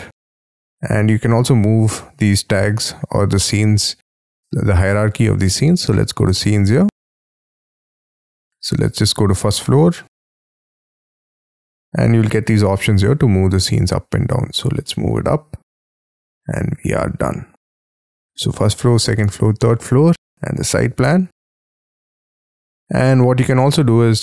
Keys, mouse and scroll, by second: 8.2-10.7 scroll down 1, 10.7-15.7 scroll down 1.